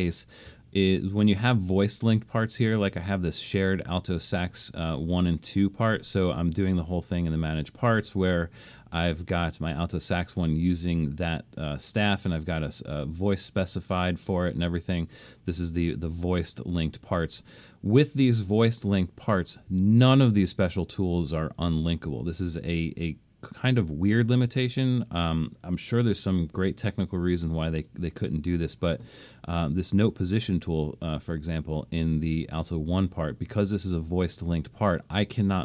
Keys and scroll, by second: 27.4 super+=.